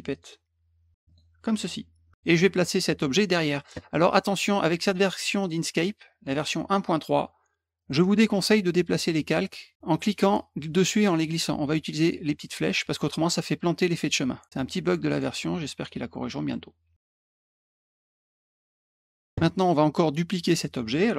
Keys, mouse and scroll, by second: 0.1 click, 1.0 click, 5.4 click, 6.3 click, 7.8 click, 14.4 click, 15.0 click, 16.5 middle click, 18.4 click, 19.0 middle click.